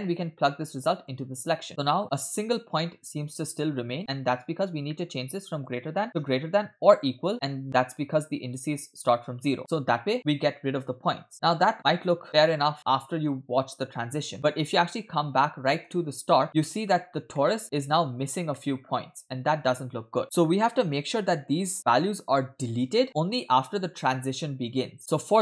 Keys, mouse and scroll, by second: 0.5-1.2 drag, 2.0-4.0 drag, 4.0 middle click, 4.1-4.9 scroll up 5, 4.9 middle click, 5.6-7.2 drag, 9.7-11.3 drag, 11.3 scroll down 2, 11.8 space, 12.3 click, 12.3 space, 15.9 space, 16.5 click, 17.4-18.3 middle drag, 18.5 shift+middle drag, 18.8-20.1 scroll up 2, 25.0-25.4 scroll down 2.